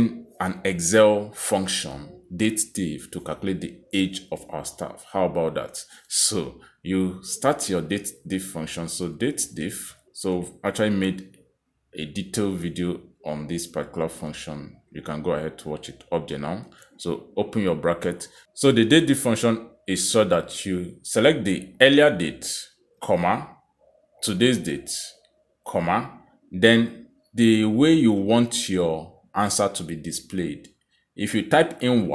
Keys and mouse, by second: 0.0-0.7 typing, 4.5 click, 12.4 typing, 16.8 shift+9, 23.0 click, 24.0 ,, 24.9 click, 26.3 ,, 28.8 shift+'.